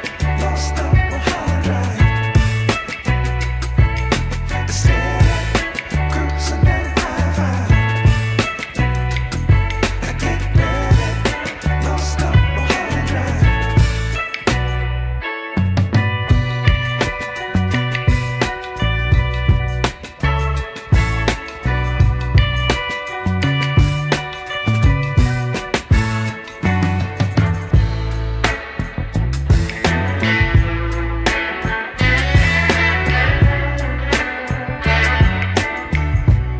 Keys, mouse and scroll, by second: 0.4 x, 2.1 Tab, 2.8-3.2 middle drag, 3.9 KP_1, 5.0 scroll down 1, 5.5 shift+middle click, 6.4 shift+middle click, 7.2-7.8 scroll down 1, 7.8 click, 7.8 scroll down 1, 9.8 click, 10.7 drag, 11.6 click, 16.9-18.7 scroll down 7, 19.5-23.5 drag, 23.7 drag, 30.3-36.5 drag.